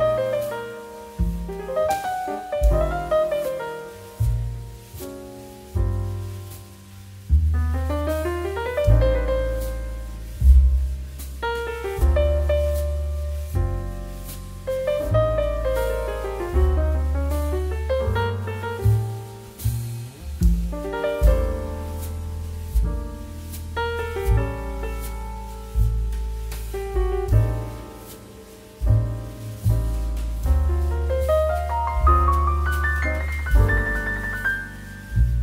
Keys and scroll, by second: 5.7 shift+r, 8.3-10.9 typing.